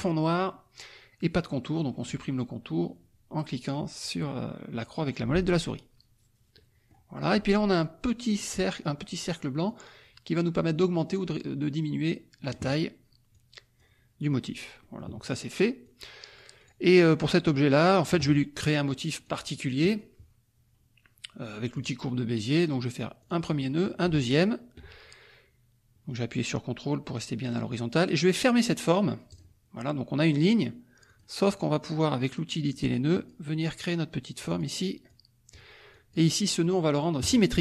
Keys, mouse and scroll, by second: 1.9 middle click, 6.5 middle click, 9.6-12.7 drag, 13.3 click, 14.8 middle click, 15.8 click, 16.7 click, 17.0-18.2 drag, 19.2 click, 21.7 click, 23.2 click, 24.3 ctrl+click, 29.3 click, 31.0 click, 32.7 click, 33.9 click, 35.0 click, 35.9 click, 37.2 click.